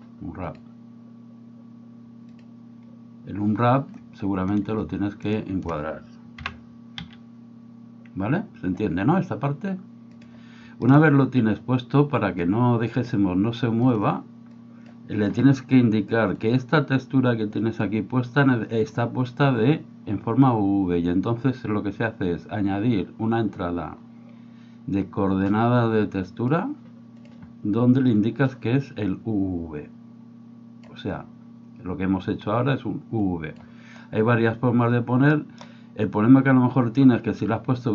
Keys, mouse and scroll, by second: 6.4 g, 12.4 click, 14.7 click, 16.5-17.9 drag, 28.4-30.9 drag, 33.2 click, 35.3 middle click.